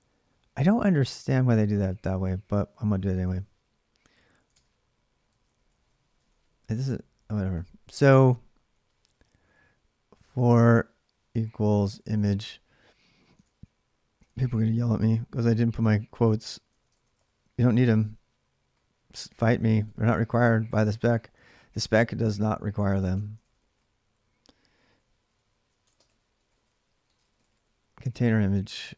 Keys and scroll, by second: 3.1 alt+Tab, 4.3 alt+Tab, 5.3 ctrl+a, 5.5 ctrl+a, 6.0 ctrl+[, 6.1 ctrl+j, 6.6-12.4 typing, 13.1 alt+Tab, 14.0 alt+Tab, 16.3-18.5 typing, 19.6-28.1 typing.